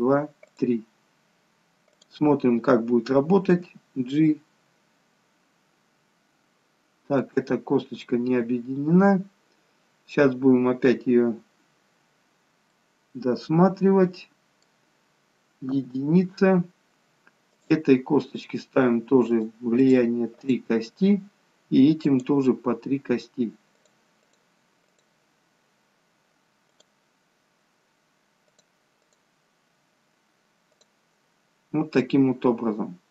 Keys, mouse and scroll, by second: 3.7 g, 17.5 click, 19.3 click, 28.6 click.